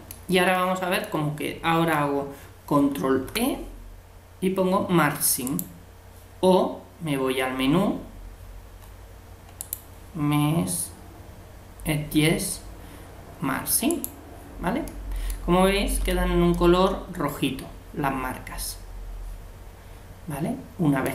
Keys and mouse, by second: 0.5-2.4 middle drag, 9.6-11.3 drag, 14.9-18.2 middle drag, 16.0 a.